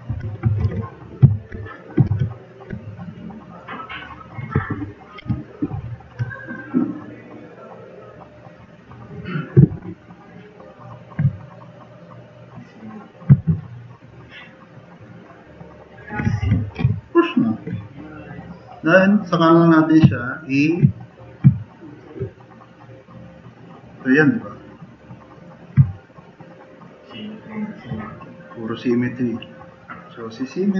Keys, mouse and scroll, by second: 0.1 4, 0.6 alt+g, 2.1 alt+q, 5.2 Delete, 14.8 drag, 15.6-16.0 drag, 16.5 4, 16.8 drag.